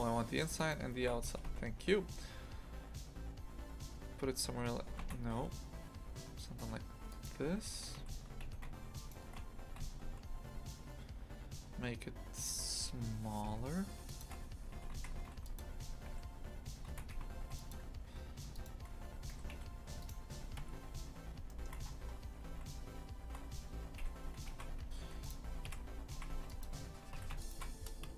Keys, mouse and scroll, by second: 1.3 g, 7.7 3, 7.9 a, 8.4 a, 8.9 alt+shift+right click, 9.7 s, 14.9 shift+f, 15.8 2, 16.0 3, 16.9 shift+f, 18.6 alt+shift+right click, 19.3 2, 19.5 a, 20.0 right click, 20.6 KP_3, 21.5 shift+middle click, 21.8-22.5 scroll up 7, 22.5 s, 24.5 shift+f, 25.6 KP_Decimal, 26.1 shift+f, 27.1 a, 27.4 alt+shift+right click.